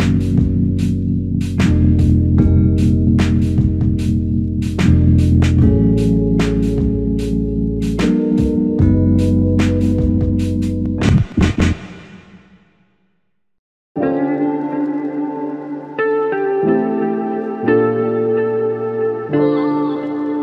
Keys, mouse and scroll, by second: 4.2-4.7 scroll up 1.